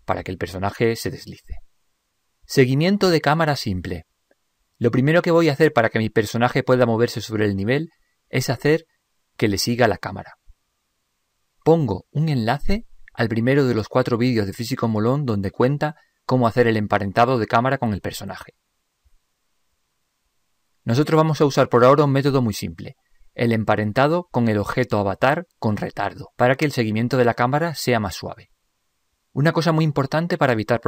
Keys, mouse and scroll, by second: 0.8-5.4 middle drag, 7.4-9.1 middle drag.